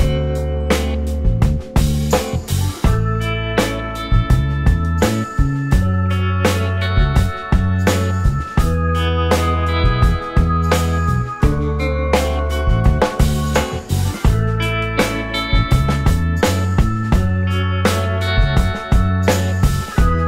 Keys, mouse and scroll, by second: 1.5 r, 2.6 shift+click, 7.9 shift+double click, 8.4 space, 8.8 space, 9.1 scroll up 1, 9.2 space, 9.6 alt+middle click, 9.8 alt+scroll up 1, 10.1 alt+click, 10.4 alt+scroll down 1, 10.4-10.8 alt+scroll up 2, 11.0 alt+middle click, 11.3 alt+scroll up 2, 11.7-12.2 typing, 15.3 Right, 16.6 r, 19.3-20.0 typing, 20.0 right click.